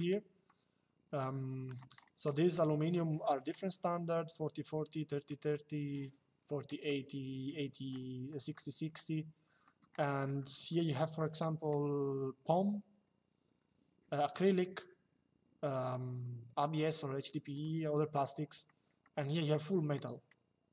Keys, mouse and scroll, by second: 0.1 shift+middle click, 2.3 shift+middle click, 3.6 middle click, 5.0 middle click, 6.4 middle click, 8.0 middle click, 10.1 middle click, 17.9 middle click.